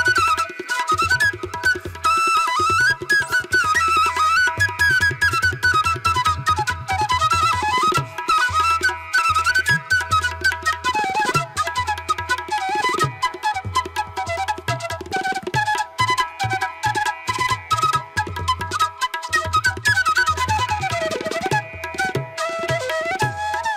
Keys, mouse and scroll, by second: 2.2 space, 3.2 space, 5.5 space, 8.5 ctrl+-, 11.1 ], 13.9 ctrl+alt+z, 14.0 ], 16.8 space, 19.4 space, 22.5 space, 23.3 ctrl+=.